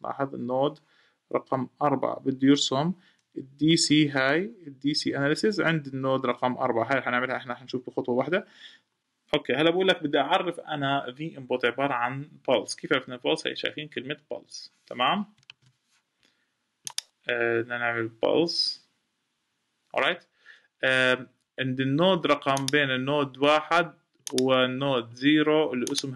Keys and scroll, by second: 15.2 super+p.